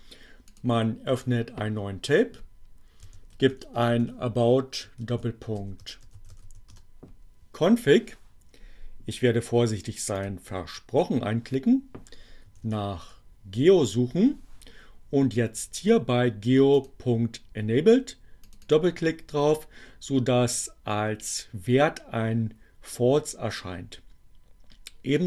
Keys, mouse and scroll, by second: 0.5 click, 2.1 a, 3.3-6.9 typing, 9.8 click, 12.0-13.0 typing, 15.4-17.1 drag, 17.8 click.